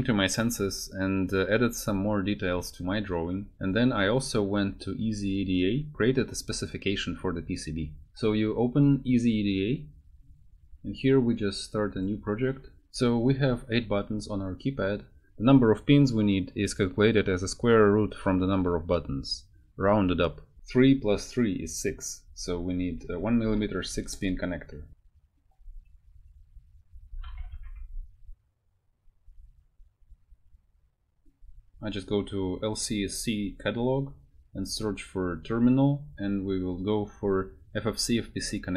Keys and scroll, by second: 22.9 BackSpace, 23.1 shift+Left, 23.7 6, 24.0 Return, 26.5-28.1 typing.